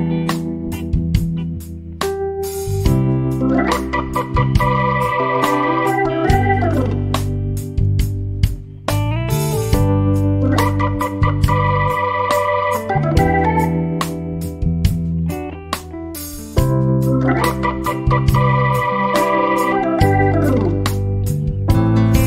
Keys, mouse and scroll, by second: 0.0 click, 0.5 ctrl+scroll up 1, 1.3 click, 2.0 F2, 2.7-3.5 ctrl+alt+click, 3.9 Delete, 5.3 click, 5.9 ctrl+alt+click, 6.9 Delete, 7.9 ctrl+scroll down 1, 8.1 click, 10.1 ctrl+scroll down 1, 10.5 z, 11.0-11.6 click, 11.4 F1, 11.9 ctrl+scroll up 1, 13.5-13.8 typing, 14.3-15.2 click, 15.2 F1, 15.9-16.5 click, 16.6 F2, 17.1 ctrl+shift+c, 17.7 click, 18.1 shift+b, 19.0 Delete, 19.3 F1, 19.7 ctrl+scroll down 1, 20.9 F7, 21.4 shift+click.